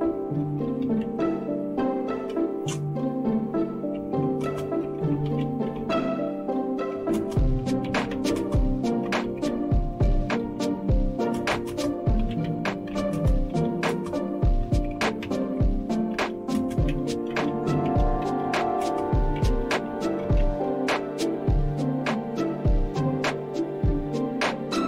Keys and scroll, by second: 0.0-1.5 typing, 2.1 Return, 3.9-20.9 typing.